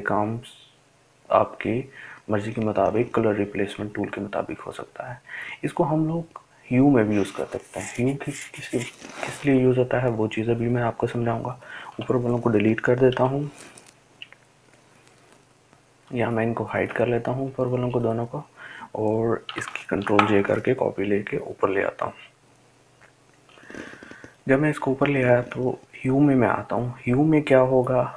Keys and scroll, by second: 15.2 Delete, 22.1 ctrl+j.